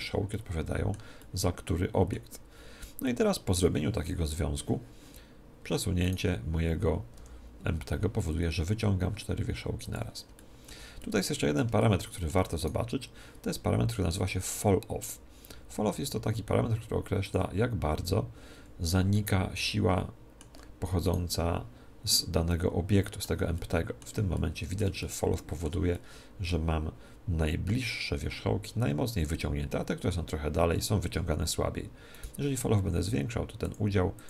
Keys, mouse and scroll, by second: 0.3-4.9 middle drag, 0.8 click, 2.6 a, 5.7 Tab, 6.0 right click, 7.2 g, 10.0 click, 10.4-13.4 middle drag, 12.6 right click, 17.2 click, 19.2-21.0 middle drag, 21.0 right click, 22.5-27.8 middle drag, 32.2 right click, 33.6-34.2 drag.